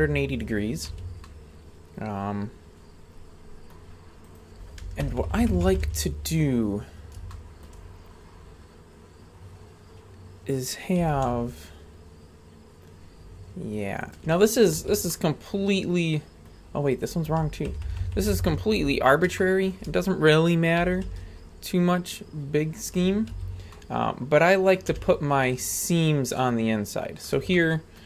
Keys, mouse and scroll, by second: 0.9 a, 1.2-3.7 middle drag, 4.3 right click, 5.1 ctrl+KP_Add, 5.2 ctrl+KP_Add, 5.3 ctrl+KP_Add, 5.5 ctrl+KP_Add, 5.7 ctrl+KP_Add, 5.8 ctrl+KP_Add, 6.9-7.2 scroll up 2, 7.3-7.7 shift+middle drag, 7.9-9.5 scroll up 2, 11.0 r, 14.8 a, 15.1-16.5 middle drag, 16.9 right click, 17.7 ctrl+KP_Add, 17.9 ctrl+KP_Add, 18.0 ctrl+KP_Add, 18.2 ctrl+KP_Add, 18.3 ctrl+KP_Add, 18.4 ctrl+KP_Add, 19.4-19.8 shift+middle drag, 20.8 r, 23.3 a, 23.7-24.8 middle drag, 24.9 z, 25.9 scroll up 2, 26.3-27.2 middle drag, 27.5-28.0 shift+middle drag.